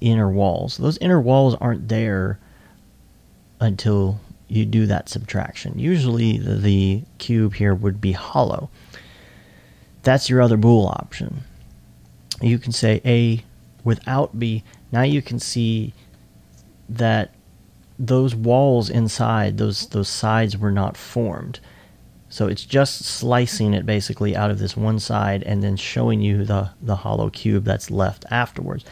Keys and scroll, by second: 15.4-16.1 typing, 25.6 alt+2, 26.6-27.8 typing.